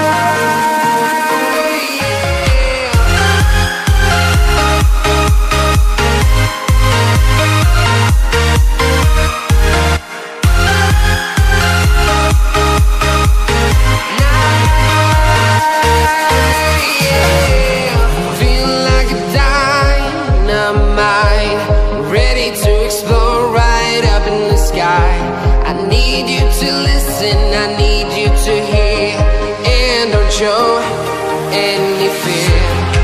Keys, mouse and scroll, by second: 0.7 click, 6.3 Up, 7.6 Return, 9.9 0, 12.8 alt+scroll up 1, 14.6 alt+scroll down 1, 15.4-15.7 alt+scroll up 2, 16.2 click, 17.7 click, 22.0-22.7 typing, 25.9 click, 31.5 typing, 32.8-33.0 typing.